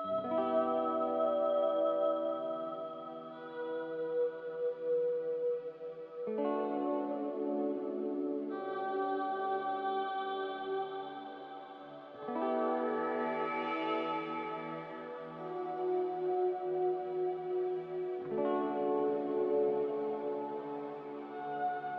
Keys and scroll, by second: 3.4 ctrl+b, 6.3 typing, 6.8 Return, 10.1 ctrl+b, 10.7 a.